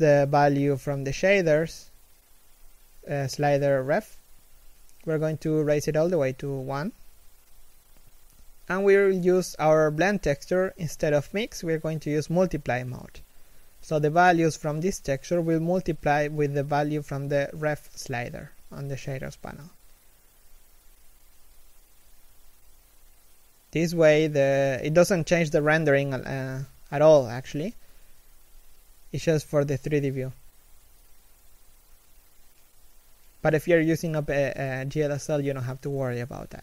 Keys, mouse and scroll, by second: 20.1 middle click, 22.1 scroll up 1, 23.7 alt+right click, 25.5 g, 30.1 alt+right click, 31.2 g, 33.5 scroll down 1, 33.7 middle click.